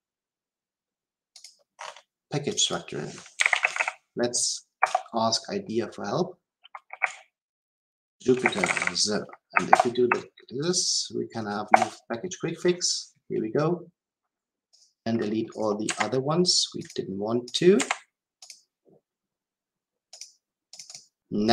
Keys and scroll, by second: 4.7 Return, 9.6 alt+Return, 15.8 Delete.